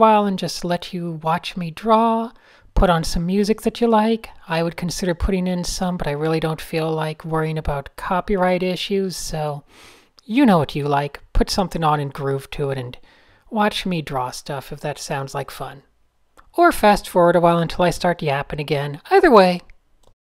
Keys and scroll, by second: 1.3 Tab, 1.4 Tab, 3.3-4.1 typing, 5.4 Tab, 5.6-7.9 typing, 8.4 Tab, 9.1 a, 10.3 n, 11.1 Tab, 13.6 super+z, 14.6 super+z, 15.3 super+z, 18.7 super+z, 18.8 super+z, 18.9 super+z, 19.2 Tab.